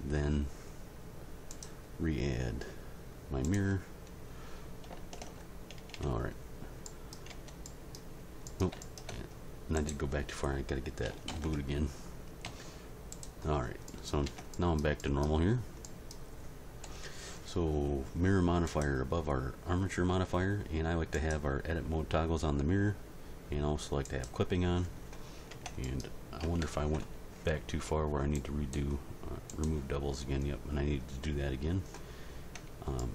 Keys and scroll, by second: 5.2 alt+h, 5.9 Tab, 7.3 Tab, 11.3 ctrl+l, 12.5 x, 14.2 Tab, 16.8 End, 25.5 Tab, 26.4 a, 32.5 a.